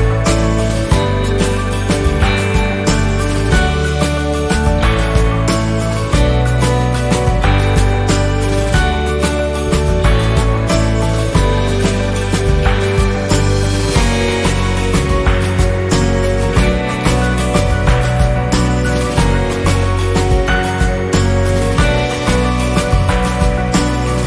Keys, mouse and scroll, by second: 2.3 F10, 2.5 click, 3.6 Delete, 4.6-10.4 drag, 10.4-16.4 drag, 16.4-22.1 drag, 22.1-23.8 drag, 23.8-24.2 drag.